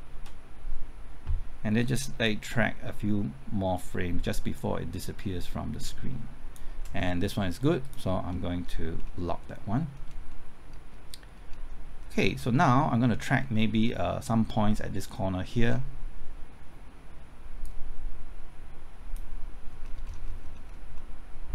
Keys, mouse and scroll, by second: 0.1 ctrl+t, 2.2-6.9 drag, 8.6 scroll down 1, 9.4 middle click, 9.9-10.3 scroll up 1, 10.3 middle click, 11.3 scroll up 1, 12.4 middle click, 12.7 scroll up 1, 13.4 scroll down 1, 17.6-19.8 drag, 19.8 scroll up 1, 20.9 middle click.